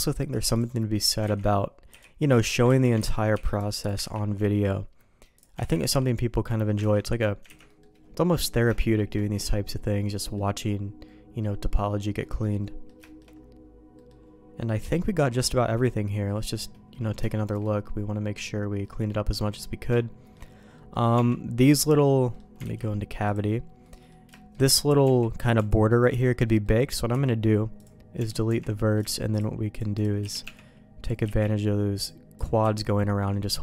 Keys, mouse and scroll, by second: 0.5 click, 1.3 ctrl+x, 1.9 b, 2.6 ctrl+q, 3.1 ctrl+x, 3.3 b, 4.0 ctrl+q, 5.6 ctrl+x, 5.8 b, 6.8 ctrl+q, 7.5 ctrl+x, 7.6 middle click, 8.7 shift+middle click, 9.2 middle click, 10.1 middle click, 11.0 middle click, 11.6 middle click, 12.2 middle click, 12.6 middle click, 13.0 shift+middle click, 13.9 middle click, 14.6-16.6 middle drag, 16.9 middle click, 17.2 shift+middle click, 17.8 middle click, 19.4 middle click, 19.9 shift+click, 20.7 middle click, 21.1 Tab, 21.6 middle click, 22.3 middle click, 22.9 alt+v, 23.8 middle click, 24.3 middle click, 25.0 Tab, 25.9 click, 26.6 middle click, 27.1 x, 28.4 Tab, 28.9-30.1 shift+drag, 30.2 f, 30.4 Tab, 31.0 click, 31.2 f, 31.9 click, 32.3 click, 32.6-33.6 f.